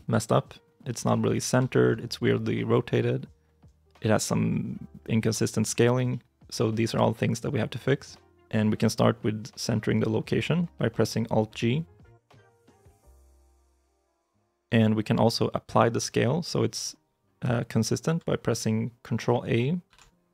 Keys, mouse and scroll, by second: 1.6 shift+middle click, 6.0 middle click, 6.5 shift+middle click, 6.8 shift+middle click, 19.7 ctrl+a.